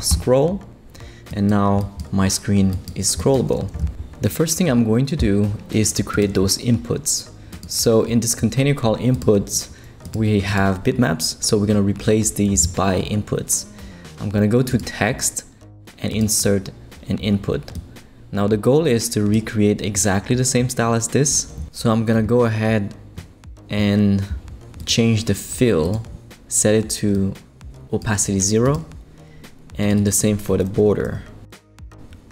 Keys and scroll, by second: 0.0-0.3 typing, 31.0 0, 31.5 Return.